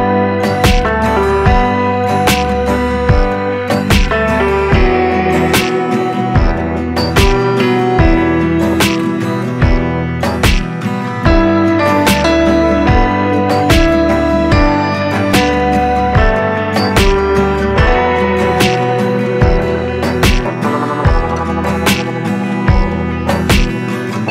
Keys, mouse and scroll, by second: 12.1 click, 20.2 click, 22.9 click.